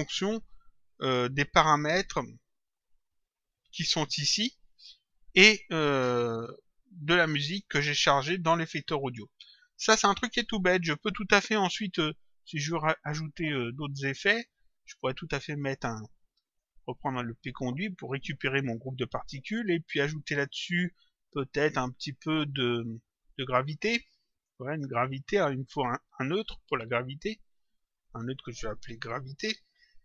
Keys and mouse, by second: 6.3 click, 15.1 click, 17.5 click, 22.0 click, 23.7 click, 25.6 click, 28.0 click, 29.1-30.0 typing.